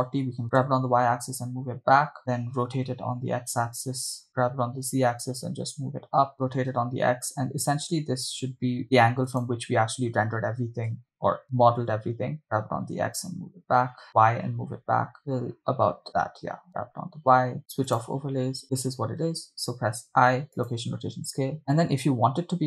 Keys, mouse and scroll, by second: 0.4 Left, 0.4 Right, 0.6 g, 0.8 y, 2.2 click, 2.8 r, 3.2 x, 4.3 click, 4.5 g, 4.9 z, 6.3 click, 6.7 r, 7.0 x, 9.6 click, 10.7 g, 11.3 y, 11.8 z, 12.8 click, 12.8 g, 13.2 x, 14.1 y, 15.4 click, 16.7 g, 16.9 y, 17.6 click, 18.3 click, 20.1 i, 21.6-22.3 scroll down 2.